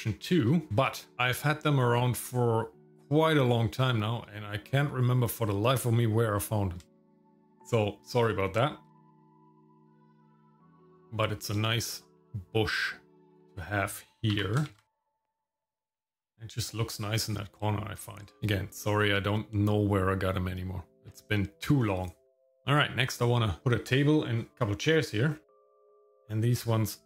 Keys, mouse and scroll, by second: 0.7 alt+r, 1.1 shift+middle click, 7.0 shift+middle click, 7.3 shift+middle click, 8.9 r, 9.7 shift+middle click, 9.9 ctrl+click, 10.0 middle click, 10.1 scroll up 1, 10.4 middle click, 10.5 scroll down 1, 10.6 middle click, 10.9 KP_0, 13.3 click, 14.3 g, 16.2 ctrl+click, 17.1-18.3 middle drag, 22.2 click, 25.6 click, 25.7-26.0 scroll up 3, 26.2 click.